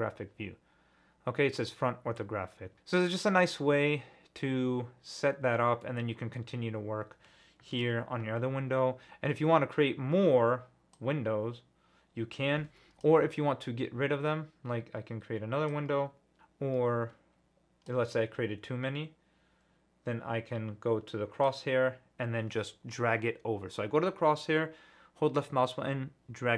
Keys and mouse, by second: 5.8-6.3 middle drag, 7.7 n, 11.2-13.0 drag, 15.7-17.9 drag, 21.6 click, 21.9-26.5 right drag.